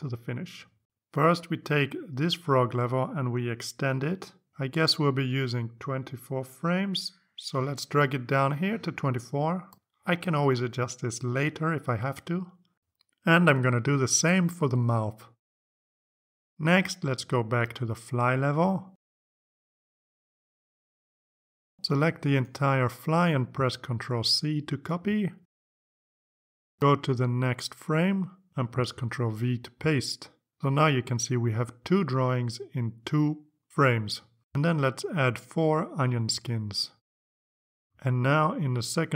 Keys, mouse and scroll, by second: 4.4-8.7 drag, 11.9 click, 14.1-17.5 drag, 20.9 click, 22.7 click, 23.6-25.2 drag, 26.1 ctrl+c, 27.2 click, 28.5 ctrl+v, 33.1-34.8 drag, 35.0-37.1 drag, 38.2-39.1 drag.